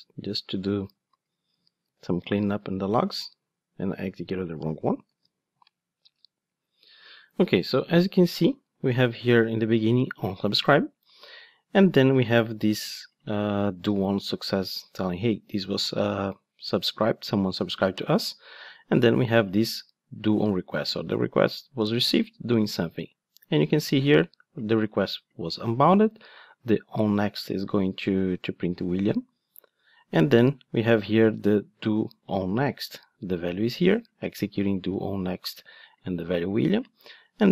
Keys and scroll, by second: 1.8 ctrl+d, 5.0 ctrl+shift+d.